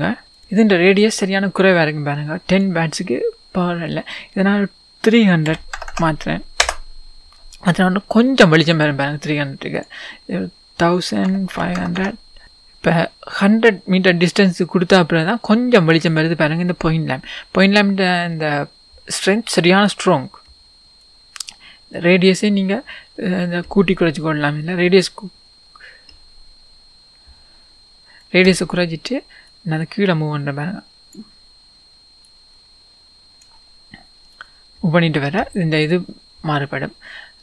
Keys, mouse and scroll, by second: 0.4 click, 6.6-29.7 drag, 6.6 KP_0, 6.7 Return, 8.0-8.8 scroll up 1, 12.4 Return, 16.7 scroll down 1, 33.9-35.0 scroll down 2, 35.0-36.4 scroll up 2, 36.4-37.4 scroll up 1.